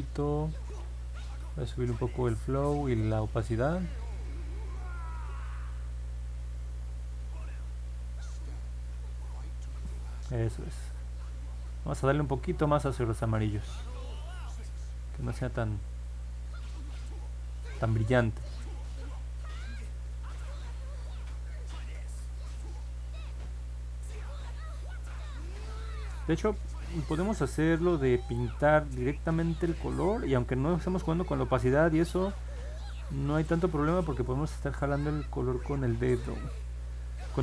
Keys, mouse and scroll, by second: 8.4-9.7 drag, 14.6 click, 14.9 click, 15.2 click, 15.4 click, 15.7 click, 16.1 click, 18.1 click, 18.9-22.0 drag, 23.4-25.7 drag, 27.3-29.6 drag, 30.3-31.5 drag, 32.9 click, 35.3-37.4 drag.